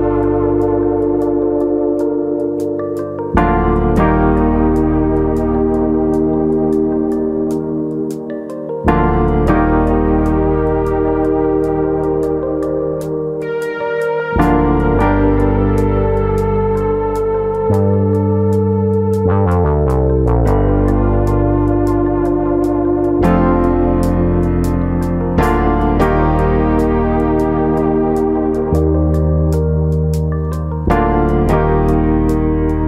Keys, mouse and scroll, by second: 2.5 click, 3.6 click, 5.7 click, 6.5 click, 9.1 click, 12.4 click, 13.3 click, 16.5 click, 17.2 click, 17.9 ctrl+KP_Add, 18.7 s, 21.0 ctrl+KP_Add, 21.9 click, 23.4 click, 24.9 click, 25.4 ctrl+click, 25.9 click, 28.1 click, 28.9 click, 30.2 ctrl+KP_Add, 31.4 e.